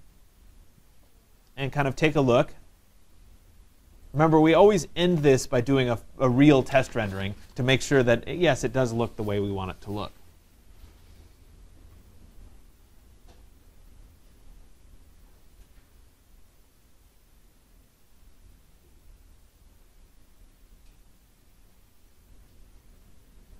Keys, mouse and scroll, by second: 4.3 drag, 6.4 click.